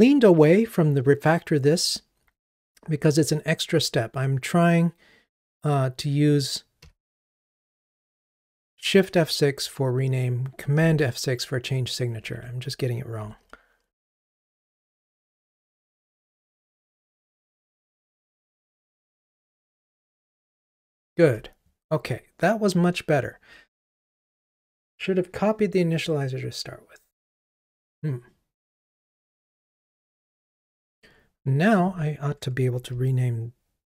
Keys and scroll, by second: 12.4 Escape, 13.4 Escape, 13.5 super+F6, 17.9 ctrl+r.